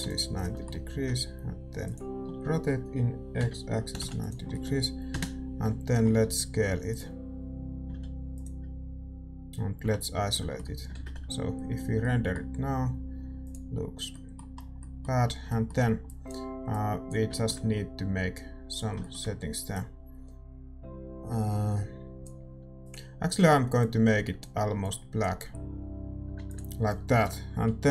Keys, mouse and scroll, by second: 0.4-2.4 middle drag, 2.4 s, 2.4 r, 4.5-23.8 middle drag, 5.1 KP_0, 6.2 s, 10.3 KP_Divide, 10.3 s, 11.9 shift+z, 13.5-27.9 drag.